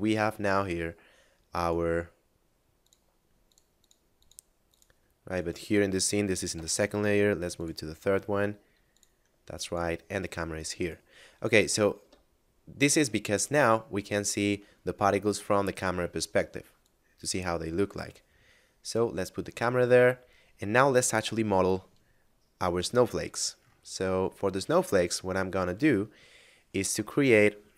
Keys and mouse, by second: 1.5 right click, 2.8 click, 5.4 right click, 6.5 m, 7.5 click, 9.6 shift+click, 10.7 right click, 11.9 KP_0, 16.7 click, 18.2 middle click, 21.3 KP_7, 22.4 middle click, 25.0 shift+a.